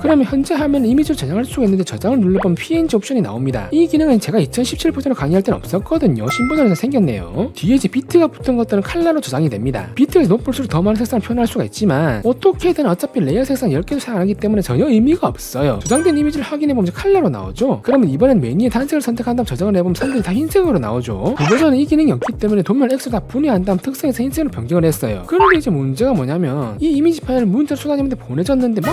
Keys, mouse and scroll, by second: 2.1 click, 4.7 click, 5.4 click, 6.1 click, 6.6 click, 7.6 click, 15.8 click, 18.3 click, 20.3-21.4 drag, 21.6 click, 22.1 click, 22.6 click, 23.8 click, 24.3 right click, 24.6-25.6 typing, 25.0 right click, 25.2 right click.